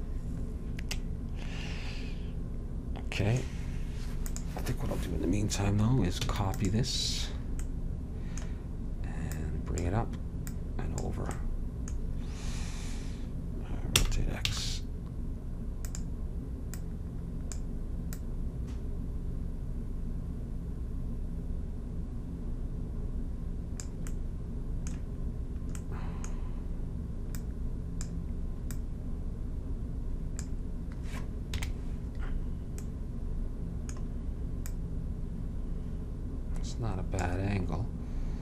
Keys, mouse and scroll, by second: 1.1-2.9 middle drag, 4.4-6.3 drag, 6.3 shift+d, 9.4-12.4 drag, 11.5-12.8 middle drag, 14.1 r, 16.9-20.0 drag, 24.3 middle click, 27.5-30.8 drag, 31.6 KP_Decimal, 34.7-36.6 drag.